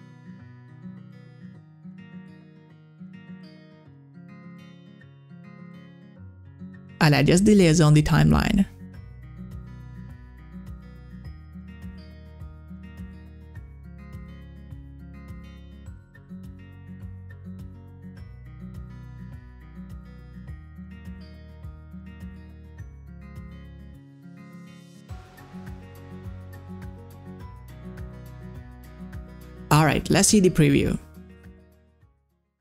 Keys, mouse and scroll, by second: 0.6 s, 1.4-15.5 drag, 27.2-30.3 drag, 30.5 click.